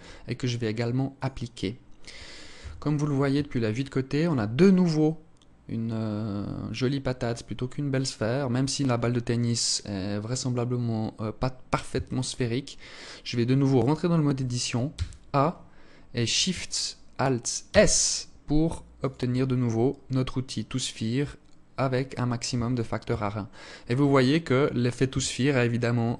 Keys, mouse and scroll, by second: 0.4 click, 1.9 KP_1, 3.0 alt+shift+click, 3.9 scroll up 1, 11.2 Tab, 14.2 a, 17.0 alt+shift+s, 21.8 Tab, 22.4 Tab, 23.0-23.4 scroll up 3, 23.4 alt+click, 24.4 Tab, 25.6 Tab.